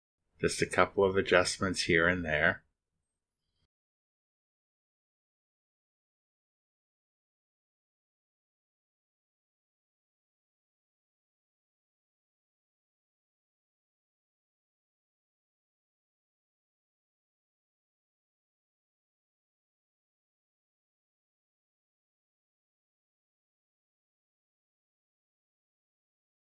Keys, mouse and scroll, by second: 0.6 right click, 1.8 click, 2.3 drag, 3.4 click, 4.3 click, 4.6 click, 5.7 drag, 7.5 drag, 7.9 click, 8.7 click, 9.9 click, 10.8 click, 11.7 click, 13.1 click, 16.4 click, 17.7 click, 21.6 click, 23.6 click, 24.5 click.